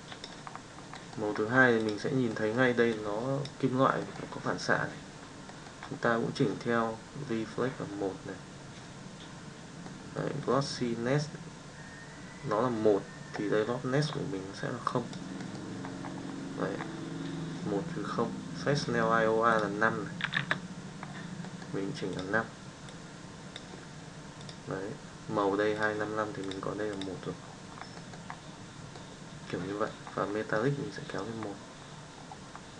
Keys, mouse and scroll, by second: 0.0 click, 9.8 middle click, 14.9 click, 15.4 middle click, 19.6 click, 21.5 middle drag, 22.1 click, 22.8 click, 27.9 middle click, 28.9 middle click.